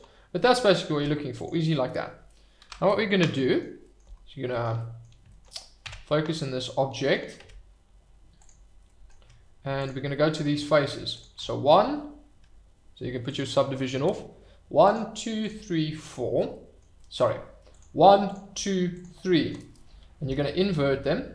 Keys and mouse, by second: 0.3 click, 0.9 Tab, 2.6 KP_Divide, 3.2-3.6 middle drag, 4.7 middle drag, 5.8 Tab, 7.4 Tab, 8.8 click, 11.1 click, 13.2 click, 16.5 middle click, 16.9 middle click.